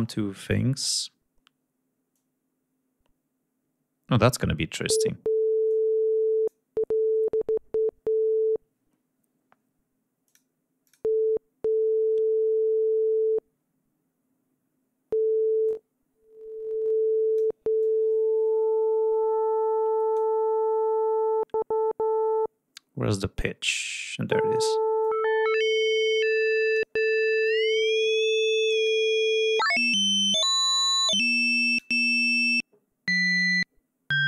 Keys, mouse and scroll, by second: 2.2-4.5 drag, 5.7 click, 10.3 click, 10.9 click, 15.7-17.6 drag, 17.8-20.4 drag, 25.0-27.0 drag, 27.5-29.1 drag, 29.6-32.0 drag.